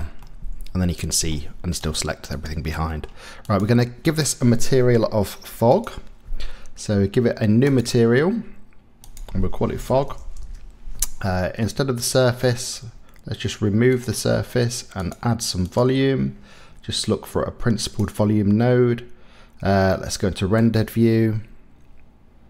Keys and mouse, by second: 0.2-1.3 middle drag, 1.9 click, 2.3 click, 2.9 click, 3.4 click, 7.7 click, 9.1-10.4 drag, 12.5-14.0 drag, 15.0 click, 15.7-18.0 drag, 20.6 click.